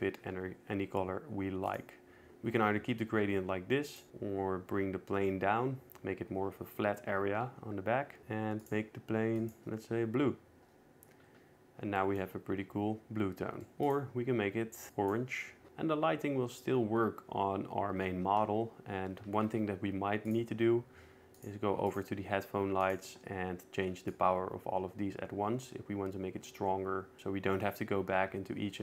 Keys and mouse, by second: 1.0 g, 4.4 g, 4.7 z, 8.6 middle click, 9.4 click, 14.0 click, 14.6 click, 21.0 click, 22.2 click, 22.7 click, 23.6-24.7 drag, 24.9-28.8 shift+drag.